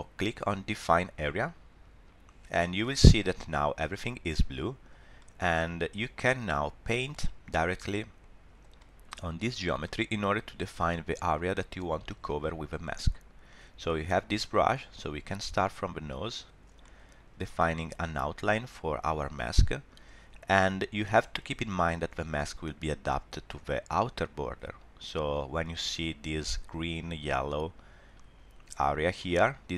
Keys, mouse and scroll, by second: 1.3 click, 3.4 middle click, 4.7-5.0 scroll up 1, 5.2 shift+middle click, 5.5 middle click, 7.1 middle click, 7.3 shift+middle click, 8.0 scroll up 1, 8.8 middle click, 9.6 scroll down 1, 9.8 middle click, 12.8 middle click, 13.3-14.7 scroll up 1, 14.7 click, 16.8 middle click, 17.8 click, 29.2 middle click.